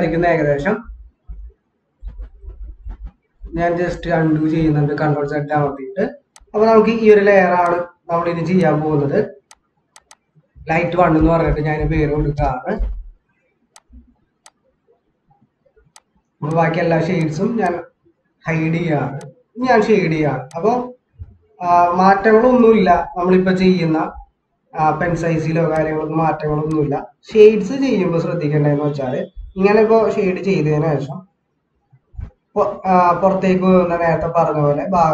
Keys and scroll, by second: 11.2-12.7 typing, 19.9 ctrl+=, 19.9 ctrl+=, 21.2 ctrl+-, 24.8 ctrl+=.